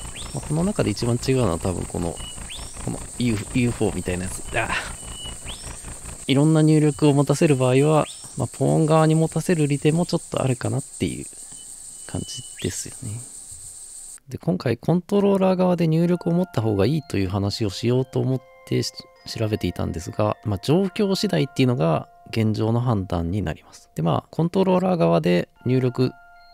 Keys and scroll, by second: 0.0-0.6 typing, 1.7-24.0 typing.